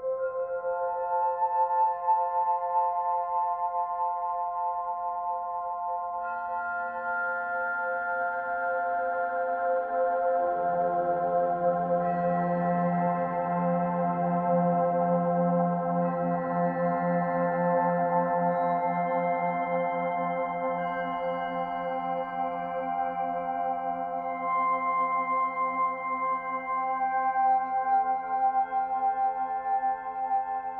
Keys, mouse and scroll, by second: 0.3-1.0 scroll up 10, 1.2 click, 2.0 g, 3.2 click, 3.7 g, 6.2 click, 8.6 click, 10.1 ctrl+z, 10.6 Tab, 11.3 3, 11.6 click, 12.3 3, 12.5 click, 12.8 shift+click, 13.2 shift+click, 13.6 shift+click, 14.2 shift+click, 14.6 shift+click, 15.4 ctrl+click, 17.7-19.2 middle drag, 19.2 l, 19.5 middle click, 19.7 scroll down 3, 20.0-21.0 middle drag, 21.0 ctrl+i, 21.6 Delete, 22.5 scroll up 4, 23.3 click, 23.7 click, 23.8 l, 24.0 middle click, 24.3 g, 26.6 middle click, 27.0 ctrl+z, 27.2 ctrl+z, 27.5 ctrl+z, 27.8 ctrl+z, 28.2 ctrl+z, 28.7 ctrl+z, 29.1 ctrl+z, 29.8 ctrl+shift+z, 30.0 ctrl+shift+z, 30.3 ctrl+shift+z.